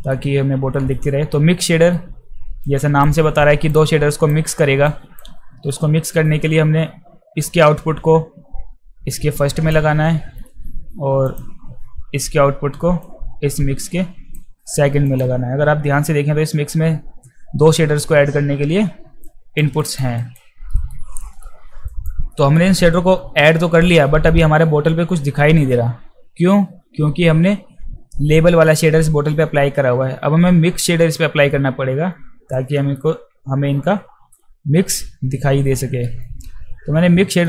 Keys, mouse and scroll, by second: 0.9-1.9 alt+middle drag, 2.6 click, 3.0 click, 3.7 click, 4.8 click, 5.7 alt+middle click, 7.5-9.6 drag, 9.7 click, 11.3 click, 13.0-14.4 drag, 15.1 click, 15.7 f, 19.2 alt+right click, 19.8 alt+right click, 20.2 alt+right click, 20.7 alt+middle click, 21.2 alt+middle click, 21.9 alt+right click, 22.3 alt+middle click, 31.5-32.6 middle drag, 34.6-36.0 middle drag.